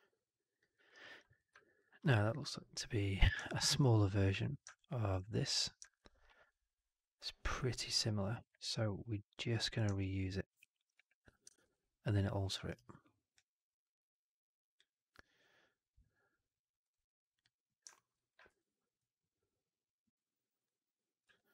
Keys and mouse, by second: 0.6 alt+middle drag, 0.8 alt+right click, 9.2 click, 9.8-10.6 alt+drag, 10.8 w, 12.1 ctrl+d, 13.8 click, 16.8 click, 17.2 click, 17.8 alt+middle click, 18.0 alt+right click, 18.3 r, 21.1 w.